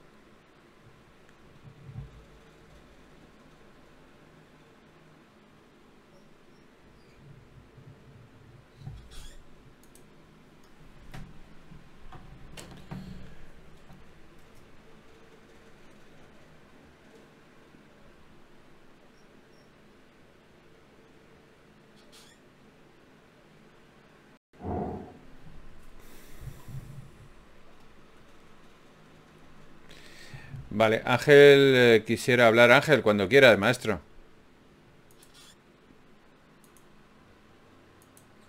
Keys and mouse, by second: 3.3 middle click, 4.1-7.3 middle drag, 13.9 ctrl+Tab, 18.3 ctrl+Tab, 20.0-23.5 middle drag, 26.0 v, 28.3 ctrl+Tab, 29.4 click, 29.8 click, 31.6-32.8 drag, 33.6 x, 37.4 ctrl+Tab.